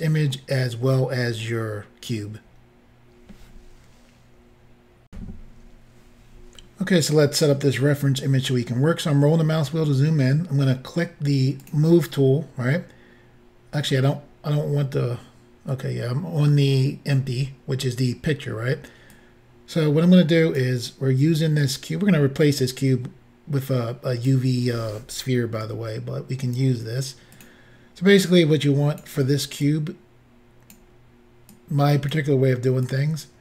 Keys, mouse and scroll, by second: 5.1 Insert, 7.5 scroll up 2, 8.7 scroll up 1, 11.6 click, 19.1 click, 21.6 click, 25.6 s, 27.4 click, 28.2 click, 29.6 click, 31.6 click, 32.9 click.